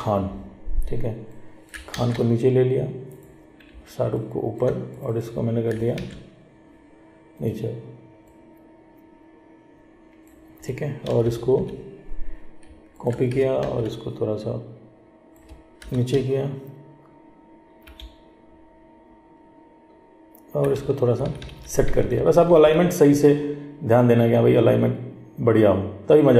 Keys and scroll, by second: 2.1 ctrl+x, 6.1 ctrl+v, 13.8 ctrl+t.